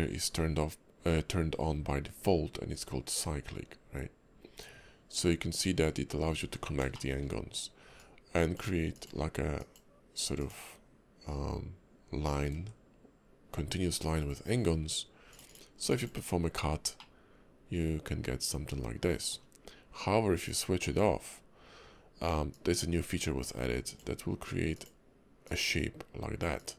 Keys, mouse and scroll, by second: 6.4-6.7 scroll up 5, 7.0 shift+middle click, 8.0 ctrl+click, 15.9 click, 16.6 scroll up 2, 17.0 middle click, 20.4 click, 21.0 `, 21.6-22.5 scroll up 3, 22.5 click.